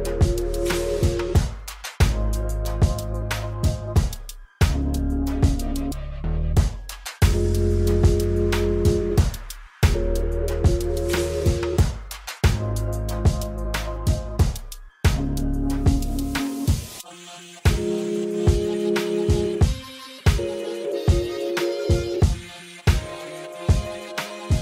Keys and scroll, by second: 2.5 alt+z, 3.0 a, 7.4 alt+z, 7.9 g, 8.5 ctrl+a, 9.2 ctrl+a, 10.5 g, 11.8 ctrl+a, 12.4 ctrl+a, 13.4 ctrl+a, 19.1 ctrl+a, 22.3 g, 23.0 g.